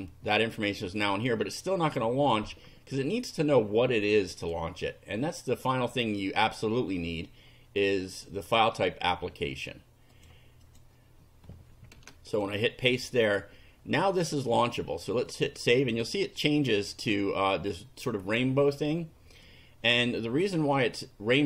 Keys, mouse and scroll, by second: 0.8 click, 4.4 click, 7.1-8.4 drag, 8.5 right click, 10.2 click, 10.6 click, 12.0 Return, 12.3 right click, 13.3 click, 15.3 click, 19.5 click.